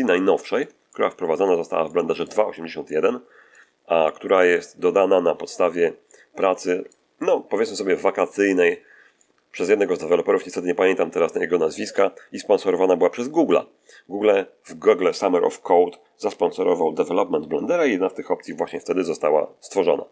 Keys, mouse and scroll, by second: 0.0 middle click, 0.8 click, 1.7 shift+click, 2.7 shift+click, 3.9 shift+click, 5.9-7.0 middle drag, 7.1 middle click, 7.9 middle click, 9.1 middle click.